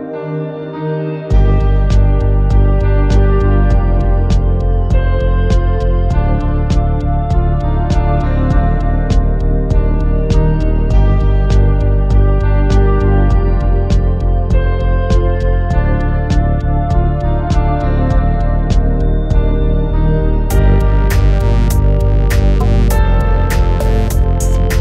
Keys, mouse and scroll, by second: 0.8 click, 1.7 g, 2.4 click, 3.9 g, 4.3 click, 4.8 click, 5.8 click, 6.6 g, 7.2 click, 8.5 shift+middle click, 10.2 click, 10.5 g, 11.6 right click, 12.4 click, 12.8 g, 16.8 click, 17.7 click, 18.2 g, 19.0 click, 19.5 shift+middle click, 20.4 click, 21.2 click, 21.6 g, 22.1 click, 23.3 g, 24.4 click.